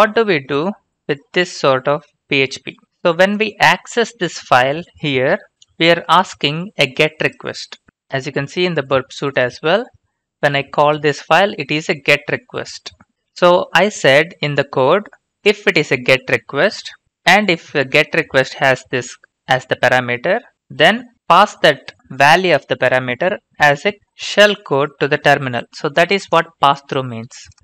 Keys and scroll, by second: 0.0 ctrl+v, 3.5 typing, 5.1 alt+Tab, 5.7 alt+Tab, 13.4 alt+Tab.